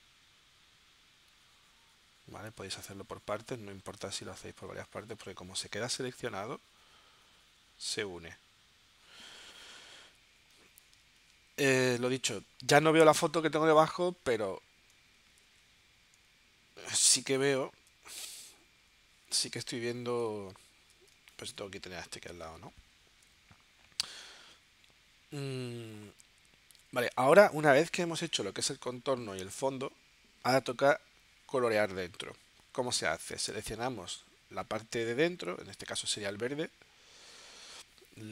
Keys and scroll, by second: 10.1 v, 11.0 space, 15.9 shift+b, 21.1 space, 22.5 space, 33.5 v.